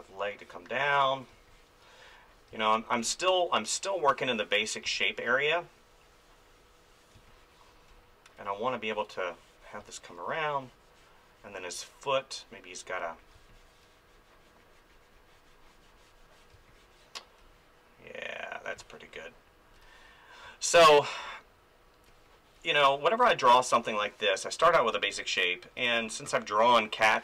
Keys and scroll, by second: 1.3 space, 4.9 space, 7.1 space, 9.8 space, 13.3 space, 16.5 space, 20.4 space, 24.3 ctrl+z, 24.9 space.